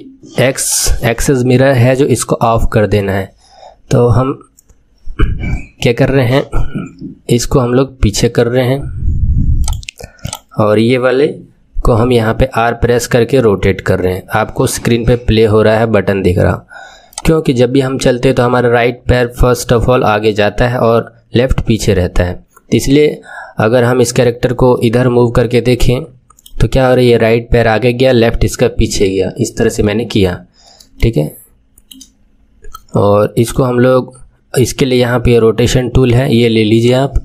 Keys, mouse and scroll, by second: 0.6 click, 10.2 click, 11.9 r, 24.7-27.7 middle drag, 29.8 KP_3, 30.9-33.4 shift+middle drag, 33.4 click, 36.8-37.2 drag.